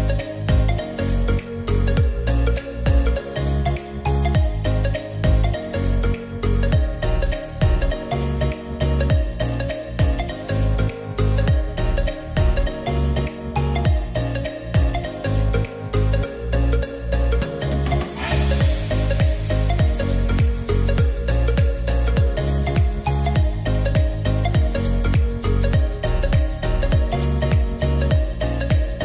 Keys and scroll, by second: 1.0 e, 26.0 alt+g, 26.6-28.3 typing.